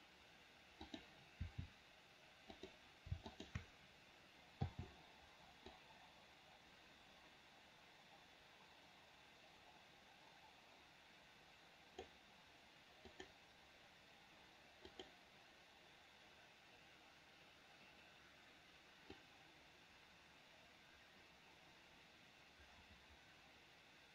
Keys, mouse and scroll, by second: 1.1 click, 1.6 r, 3.5 click, 6.0-12.3 drag, 13.4 click, 15.2 click, 19.5-24.1 drag.